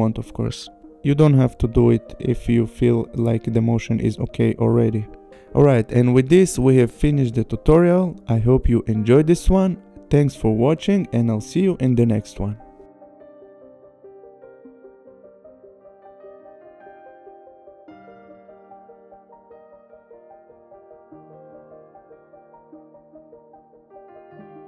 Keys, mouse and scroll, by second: 0.6 click.